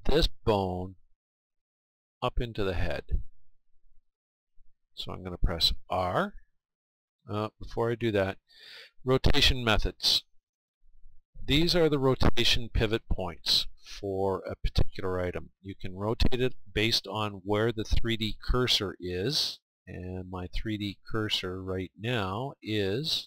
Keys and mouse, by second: 7.1-9.0 right drag, 10.2-18.8 drag, 19.6-23.2 middle drag.